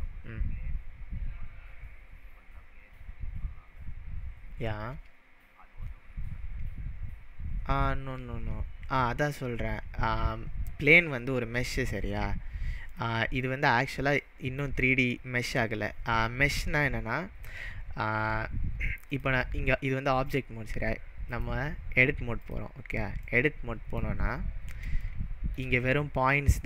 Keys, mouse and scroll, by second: 12.9 click, 13.6-15.7 drag, 14.9-16.3 middle drag, 16.2-18.0 scroll up 2, 19.1-23.3 drag, 23.3-24.1 middle drag, 24.2-25.0 scroll up 5, 25.1-25.6 shift+middle click, 25.8-26.6 scroll up 3.